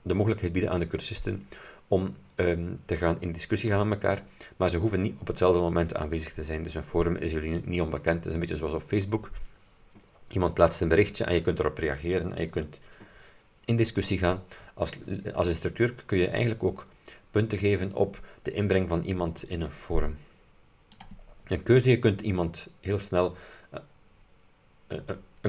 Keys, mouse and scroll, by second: 21.0 click.